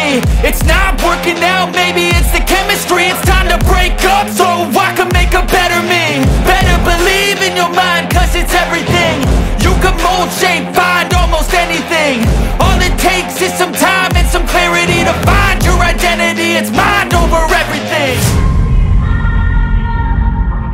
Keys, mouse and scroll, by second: 1.4 ctrl+s.